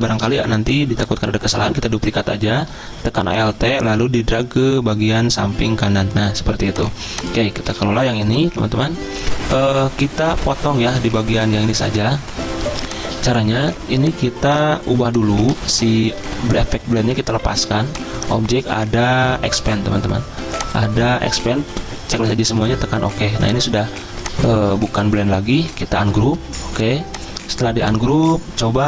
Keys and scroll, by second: 0.0 v, 6.6 z, 7.7 v, 15.2 z, 16.0 v, 23.8 z, 24.6 v.